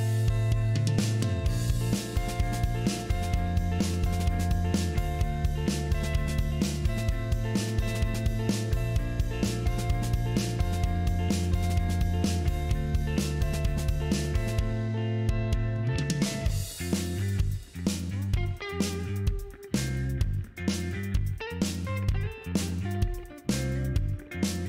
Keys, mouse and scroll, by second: 0.1 middle click, 0.4 scroll up 1, 1.4-4.6 drag, 6.2 click, 7.3 KP_5, 7.5 KP_4, 7.7 KP_Enter, 8.8 scroll down 2, 9.1-11.1 middle drag, 12.5 middle click, 13.2 middle click, 14.0 ctrl+middle click, 14.9 ctrl+middle click, 16.1 middle click, 16.9-18.8 drag, 21.5 click, 22.7 KP_5, 22.8 KP_0, 23.0 KP_Enter.